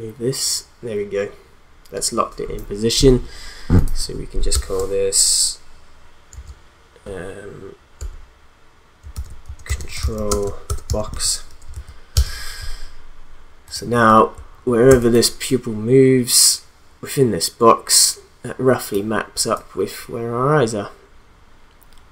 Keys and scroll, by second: 4.5 Return, 6.3 shift+p, 8.0-11.7 typing, 12.1 Return, 14.9 space.